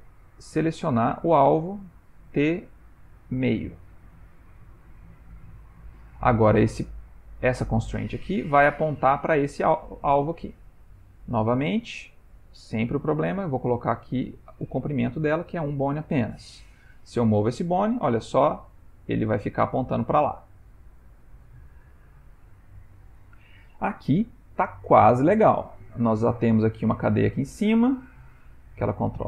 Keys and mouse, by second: 0.3 click, 7.3 click, 8.8 click, 9.3 g, 11.7 click, 13.4 click, 16.8 g, 25.7 click, 26.2 g.